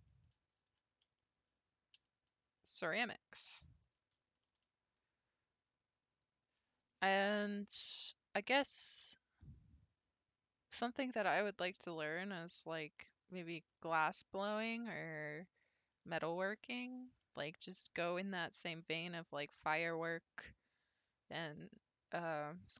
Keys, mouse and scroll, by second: 0.5 alt+click, 2.0 s, 4.1 g, 6.6-9.7 middle drag, 12.8-14.4 middle drag, 14.4 scroll down 2, 17.0-17.5 scroll down 1, 17.5-20.6 shift+middle drag.